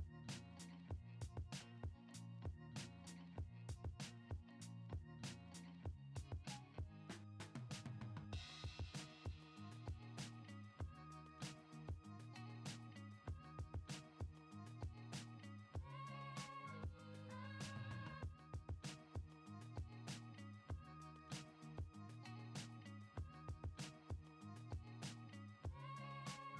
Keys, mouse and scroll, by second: 1.3-2.3 drag, 6.6 middle drag, 8.9-10.7 drag, 13.2 middle click, 14.9-16.6 drag, 18.7 middle drag, 20.0 click, 21.8-22.3 middle drag, 23.1 click, 25.6-26.5 drag.